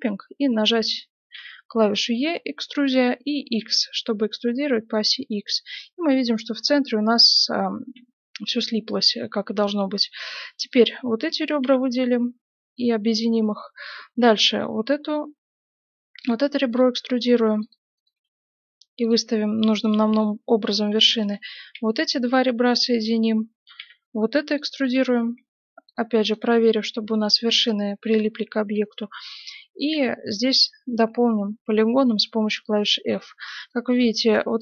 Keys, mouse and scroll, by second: 1.3 e, 5.3-9.4 middle drag, 7.2 right click, 10.6 right click, 11.6 f, 12.3-13.3 middle drag, 13.3 right click, 14.3 e, 16.7-19.5 right drag, 17.3 g, 18.1 g, 19.8-24.4 right drag, 21.7 f, 23.7 e, 24.7-30.6 right drag, 25.4 g, 26.4 g, 29.9 f, 32.3-34.6 middle drag, 33.6-34.6 right drag.